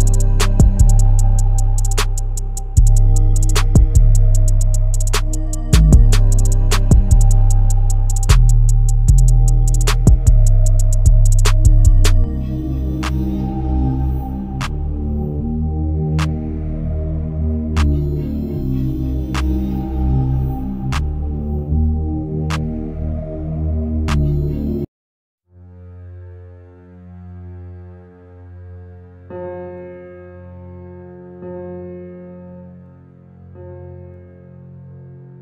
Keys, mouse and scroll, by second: 1.5 ctrl+r, 4.9-6.0 middle drag, 6.0 Tab, 6.6-7.6 middle drag, 7.6 Tab, 7.9 middle click, 8.4 scroll up 1, 8.7 click, 9.2-9.7 scroll up 1, 9.7 click, 10.2 click, 10.5 middle click, 11.3 e, 13.3-14.5 alt+middle drag, 14.5 Tab, 14.8-15.6 middle drag, 15.6 scroll down 2, 15.9-16.9 middle drag, 16.9 Tab, 17.1 click, 17.8 e, 19.2 Tab, 19.9-22.5 middle drag, 24.1-25.1 alt+middle drag, 25.1 scroll down 1, 25.8 g, 26.8 g, 28.3 s, 30.1-30.7 scroll up 3, 30.3 shift+middle click, 30.9-31.2 shift+middle drag, 31.2 scroll up 1, 31.5-32.2 shift+middle drag, 32.2 alt+z, 33.0 s, 34.1 g.